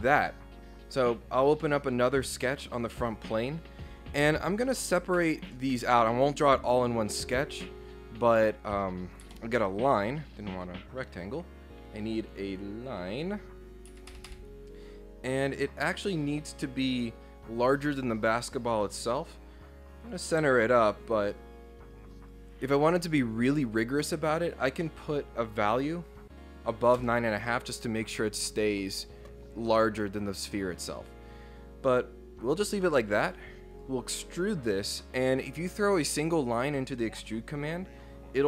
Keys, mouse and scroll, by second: 2.2 click, 2.7 click, 5.2 ctrl+8, 7.2 click, 9.2 Escape, 9.8 click, 10.3 scroll up 4, 11.2-13.0 drag, 13.9 Escape, 14.1 Escape, 14.3 Escape, 14.8 click, 18.8 right click, 20.0 click, 22.2 ctrl+click, 27.0 Return, 33.2 click, 33.7 click.